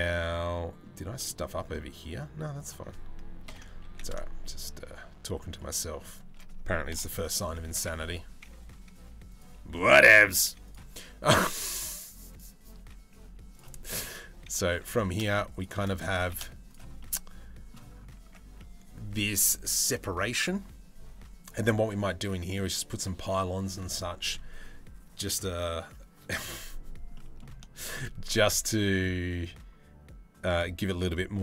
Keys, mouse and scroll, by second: 0.9 shift+middle click, 3.1 ctrl+l, 3.5 e, 6.5 ctrl+l, 7.4 s, 10.0 g, 12.1-13.2 middle drag, 13.6 s, 14.6 g, 15.7 g, 16.6 middle click, 17.9 Tab, 22.0 middle click, 26.8 middle click, 27.5 shift+middle click.